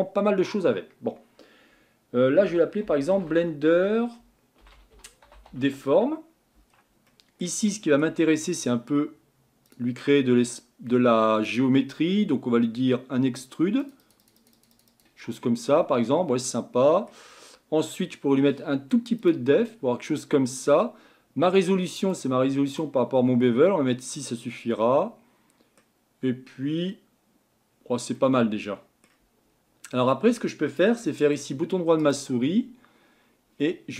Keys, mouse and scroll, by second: 2.4-5.5 typing, 5.9 Tab, 6.7-7.1 scroll down 2, 7.1-8.1 shift+middle drag, 8.1-9.6 scroll up 2, 9.6 scroll up 1, 9.6 click, 11.4-15.4 drag, 15.4-18.4 middle drag, 19.2-24.1 drag, 24.1-27.7 middle drag, 27.7-28.1 scroll up 2, 28.1-29.5 middle drag, 29.5-30.1 scroll down 2, 30.1-30.9 scroll down 1, 30.9 scroll down 1, 31.1-32.0 shift+middle drag, 32.0-33.9 right drag.